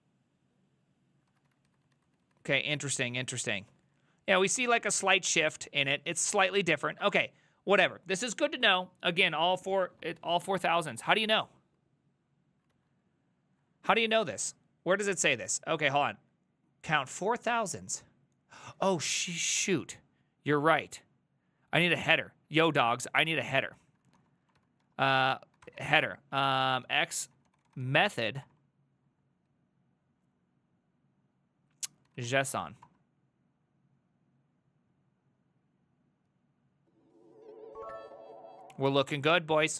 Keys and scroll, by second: 1.3 ctrl+a, 1.5 [, 1.7 ctrl+u, 1.9 ctrl+u, 2.1 ctrl+u, 2.3 ctrl+u, 2.5 ctrl+u, 3.7 ctrl+d, 3.9 ctrl+d, 4.0 ctrl+d, 4.2 ctrl+d, 4.3 ctrl+d, 4.6 ctrl+d, 7.1 alt++, 12.8 alt+{, 19.2 Up, 19.7 a, 19.8 Up, 20.8 ctrl+Left, 21.4 ctrl+Left, 21.5 ctrl+Left, 21.5 ctrl+Left, 21.6 ctrl+Left, 22.0 ctrl+Right, 22.2 ctrl+Right, 22.6 ctrl+Right, 22.7 ctrl+Right, 22.9 ctrl+Right, 23.1 ctrl+Right, 23.3 ctrl+Left, 23.6 ctrl+Right, 23.9 ctrl+Right, 24.1-28.5 typing, 31.9-33.0 typing, 35.3 typing.